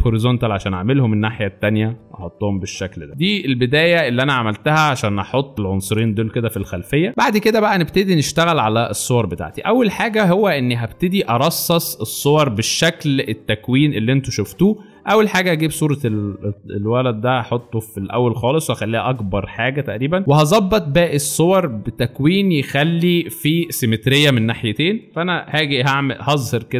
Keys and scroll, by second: 3.0 shift+Return, 3.8 alt+space, 4.8 alt+shift+space, 10.0 alt+space, 26.4 ctrl+;.